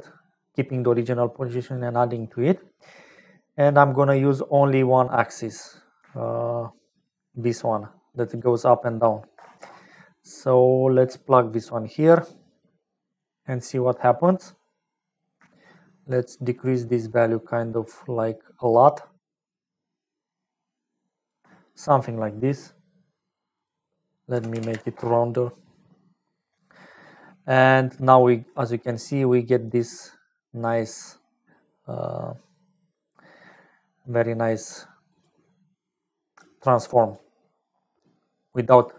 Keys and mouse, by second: 1.7 click, 6.4-8.3 shift+drag, 8.5-10.3 drag, 12.1-13.1 drag, 15.0 middle click, 16.0-21.3 shift+drag, 23.5-25.2 drag, 24.9 KP_Decimal, 27.8-29.0 middle drag, 29.0 click, 29.6-32.0 middle drag, 32.8-34.6 drag, 35.2-37.3 drag, 37.7-38.9 drag.